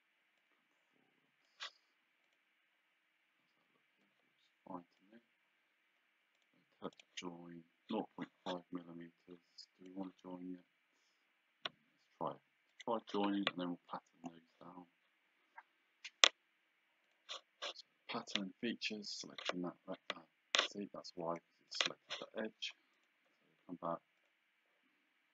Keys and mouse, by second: 0.4 click, 2.3 click, 4.1 click, 6.5 click, 9.3 click, 12.8 click, 17.1 click, 19.2 click, 21.5 click, 23.0 right click, 24.2 click.